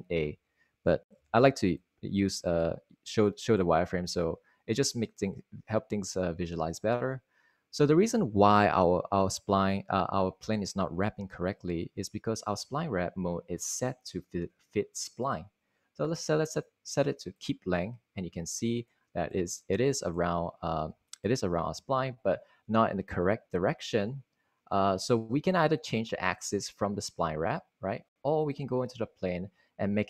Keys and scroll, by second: 0.0-2.4 typing.